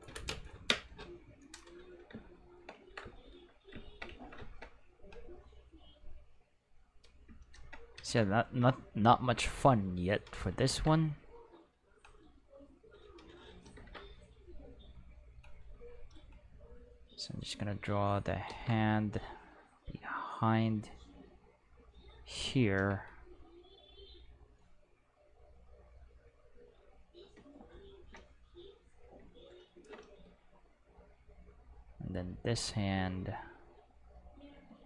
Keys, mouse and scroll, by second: 6.3 click, 9.6 click, 10.7 ctrl+z, 11.3-13.1 drag, 13.8 ctrl+z, 15.0-16.0 drag, 17.2 click, 18.5 ctrl+z, 19.6-22.1 drag.